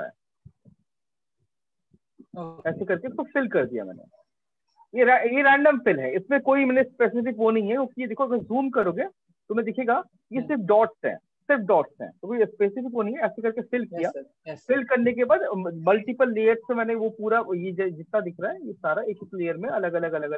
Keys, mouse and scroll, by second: 0.0 click, 0.4 click, 0.8 Left, 1.2 ctrl+-, 1.4 ctrl+-, 3.1 click, 4.2 click, 7.8 ctrl+click, 8.2 click, 8.4 click, 8.6 click, 8.9 click, 9.4 ctrl+click, 9.6 ctrl+click, 12.0 ctrl+0, 12.5 ctrl+-, 13.9 Escape, 17.9 click, 19.2 click, 20.0 ctrl+space, 20.2 ctrl+click.